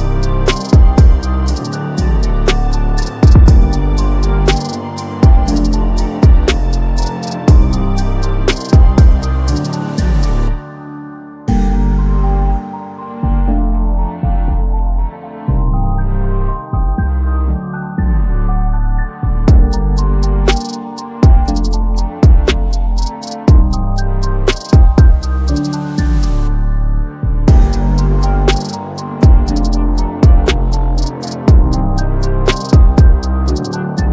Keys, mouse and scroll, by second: 0.4-1.3 drag, 6.3-7.4 typing, 7.3 click, 9.0 click, 9.7 1, 10.2 click, 11.3 click, 12.7 click, 15.0 click, 15.7 click, 17.8 click, 19.0 ctrl+z, 19.8 click, 22.3 click, 23.2-23.6 drag, 24.8 click, 25.5-26.0 drag, 27.2 click, 28.5-29.4 drag, 31.2 ctrl+z, 31.9 click, 32.9 click.